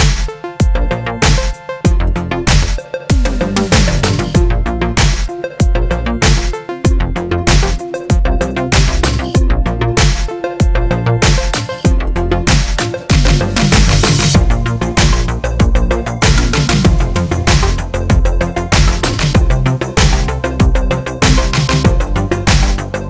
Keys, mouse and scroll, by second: 0.1-1.0 scroll down 1, 1.0 click, 1.3 g, 11.4-13.3 middle drag, 12.5 KP_0, 13.3 g, 13.3 click, 13.8 g, 14.8 click, 15.0 g, 19.8-22.7 middle drag, 20.9 scroll up 2, 22.7 click.